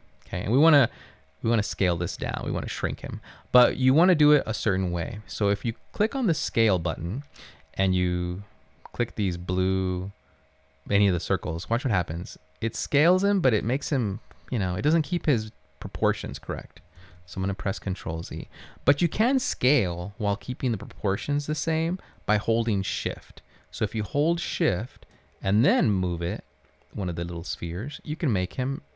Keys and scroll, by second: 17.0 ctrl+z.